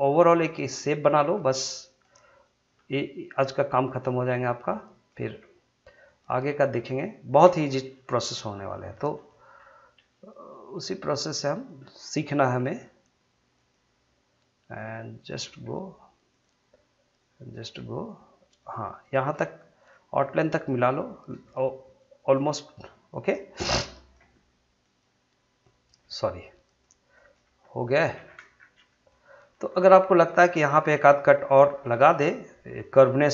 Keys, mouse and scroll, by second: 0.2 click, 1.2 g, 1.9 click, 2.7 g, 3.2 click, 5.2 g, 6.1 click, 7.9 shift+middle click, 8.9 shift+scroll up 1, 9.1 shift+middle click, 9.5-10.2 shift+scroll up 1, 10.5-12.6 drag, 12.6 g, 13.6 click, 15.4 g, 16.3 click, 17.6 g, 18.5 click, 19.3 g, 19.8 click, 20.7 g, 21.3 click, 22.4 g, 23.1 click, 24.1 g, 24.8 click, 26.0 g, 27.4 g, 27.9 click, 28.2-28.5 scroll down 1, 28.9 shift+middle click, 29.7 shift+scroll up 1, 30.1 shift+middle click, 30.5 shift+scroll up 1, 31.0-31.7 scroll up 1, 31.7 ctrl+r, 32.8 click.